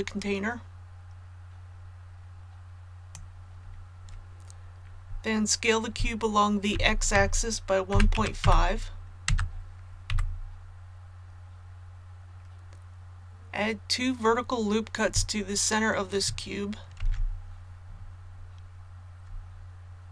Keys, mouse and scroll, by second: 6.7-8.4 typing, 10.1 a, 16.9 ctrl+r, 19.8-20.1 scroll up 1.